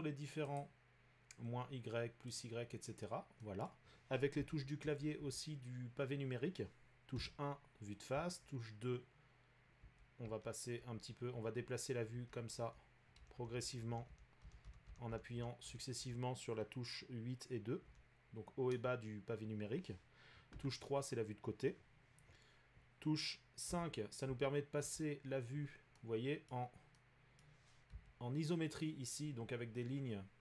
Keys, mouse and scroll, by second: 0.6 click, 2.4 click, 3.8 middle click, 4.4-5.2 typing, 7.1-8.1 typing, 8.0 middle click, 9.8-16.0 typing, 18.7 2, 22.0 2, 22.0 3, 23.7 5, 24.3 5, 24.8 5, 26.5 middle click, 27.4 middle click, 27.9 5, 29.3 middle click.